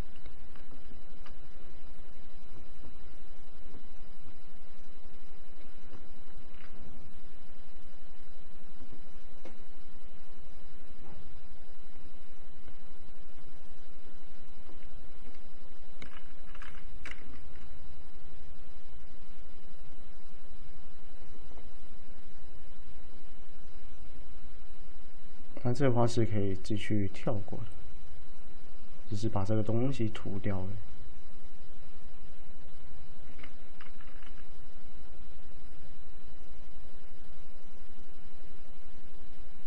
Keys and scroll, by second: 16.6 typing, 34.0-34.3 typing.